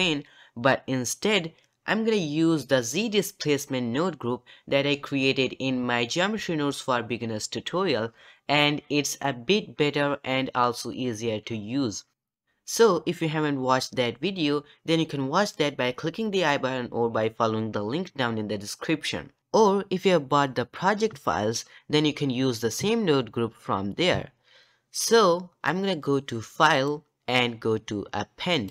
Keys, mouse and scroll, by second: 26.7-28.7 drag.